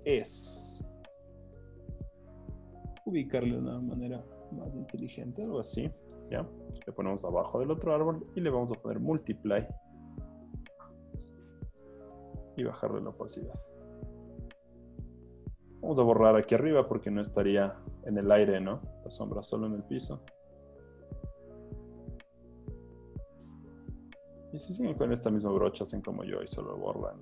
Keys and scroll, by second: 1.2 v, 16.8 e, 23.2 typing, 24.9 z, 26.9 e.